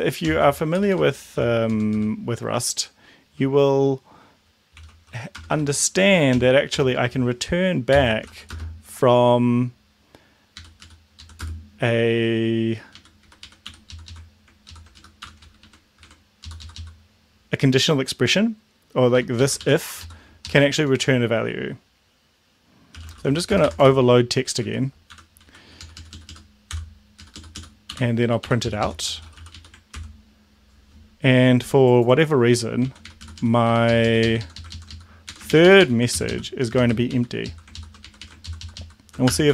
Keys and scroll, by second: 0.0-1.7 typing, 4.6-8.7 typing, 10.6 Up, 10.8 Down, 11.1 Left, 11.4 space, 12.9 Up, 13.3 Right, 13.4 Right, 13.6 End, 13.9 Left, 14.0 Left, 14.6 ctrl+Left, 14.9 ctrl+Down, 15.2 ctrl+Home, 15.6 ctrl+Right, 16.4 Left, 16.6 Left, 16.7 Left, 19.1 Right, 19.4 Right, 20.0 Left, 20.7 Left, 21.0 Left, 22.8-24.1 typing, 24.6 Delete, 25.1 Home, 25.4 Right, 25.8 Down, 25.9 Down, 26.1 Down, 26.3 Down, 27.3 Down, 27.3 ;, 29.9 ctrl+s, 32.8 Right, 33.0 Right, 33.1 Down, 33.2 Left, 33.3 Down, 33.7 Up, 34.0 Left, 34.4 Down, 34.7 ctrl+Left, 35.2 Right, 36.1 shift+Left, 36.7 shift+', 37.1 Right, 37.4 Left, 38.0 Right, 38.2 Right, 38.4 ctrl+shift+Left, 39.2 BackSpace, 39.4 ctrl+s.